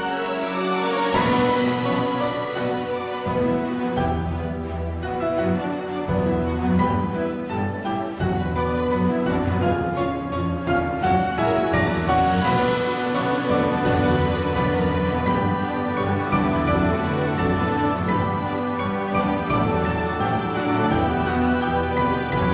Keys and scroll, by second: 5.0 e, 7.0 l, 7.9 s, 9.4 g, 12.4 a, 12.6 l, 13.7 r, 18.0 g, 20.4 s, 21.6 s.